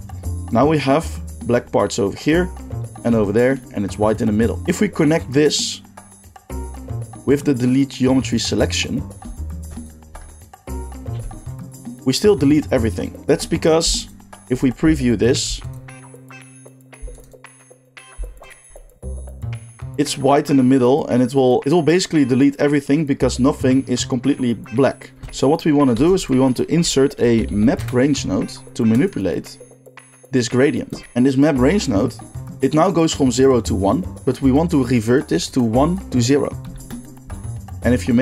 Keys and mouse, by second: 1.9 shift+middle drag, 2.6-5.6 middle drag, 5.6-9.9 drag, 9.9 ctrl+shift+middle click, 10.7-14.0 drag, 11.1 x, 15.4 ctrl+shift+middle click, 15.6 ctrl+shift+click, 15.9-16.4 shift+middle drag, 16.4 click, 17.2 ctrl+shift+click, 18.2 ctrl+shift+middle click, 18.3 ctrl+shift+click, 18.4-25.1 ctrl+shift+middle drag, 25.1-29.1 shift+drag, 25.9 shift+a, 29.1-35.1 middle drag, 35.1 click, 35.5 middle click, 35.8-37.0 drag, 37.0-38.0 middle drag, 38.0-38.2 shift+drag.